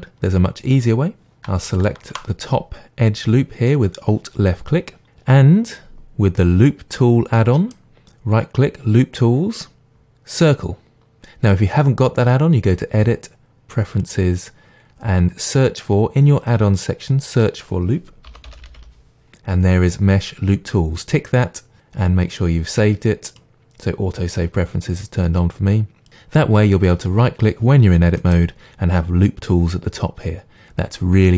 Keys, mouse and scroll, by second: 1.8 alt+click, 7.6-11.2 right drag, 12.7-28.2 drag, 28.2 right click.